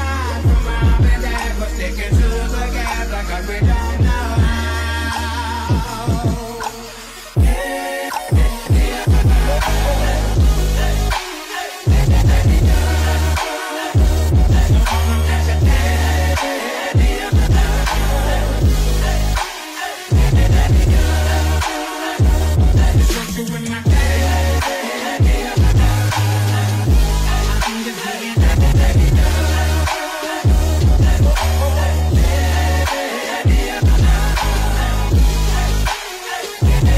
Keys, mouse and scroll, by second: 4.1-4.8 scroll up 2, 4.8-6.7 middle drag, 6.7 a, 7.6-8.2 scroll down 1, 11.5-12.5 scroll down 3, 12.5-13.3 scroll down 1.